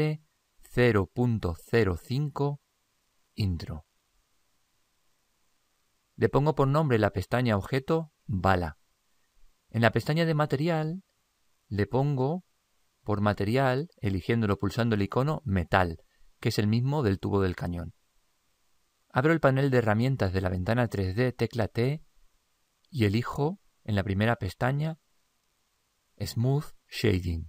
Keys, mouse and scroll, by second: 6.8-9.5 drag, 11.6-14.5 drag, 21.0 t, 22.5-24.3 drag, 27.2-27.4 drag.